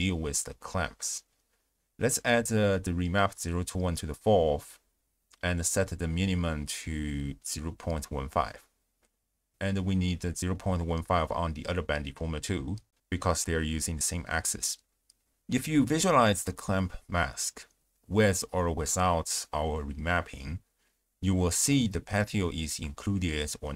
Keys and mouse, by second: 1.0 click, 1.9 click, 3.1 ctrl+a, 5.0-6.8 drag, 8.3 click, 9.2-10.5 drag, 11.6 shift+space, 12.2 d, 12.4 click, 12.7 d, 15.4 d, 16.3 click, 16.3 d, 16.9 click, 17.8 ctrl+shift+click, 18.5 ctrl+shift+click, 19.6 click, 19.8 m, 20.7 m, 22.5 click, 23.1 x.